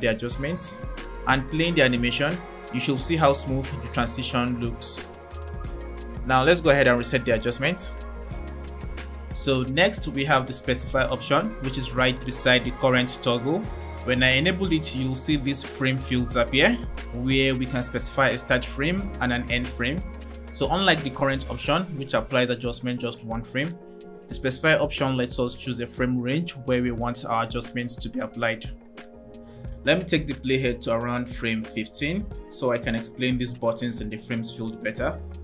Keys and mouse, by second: 1.5 click, 1.9 space, 2.8 space, 3.4 click, 3.6 space, 4.5 space, 8.1 click, 14.6 click, 31.2 click.